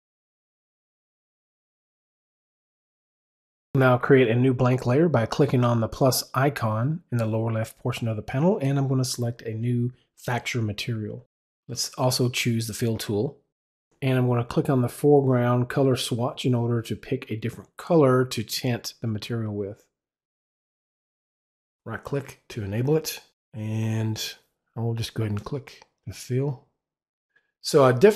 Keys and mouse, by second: 1.1 click, 5.6 click, 7.0 click, 12.3 click, 14.1 click, 15.4 click, 16.0-18.7 drag, 19.3 click, 21.7 click, 22.4 right click, 25.3 click.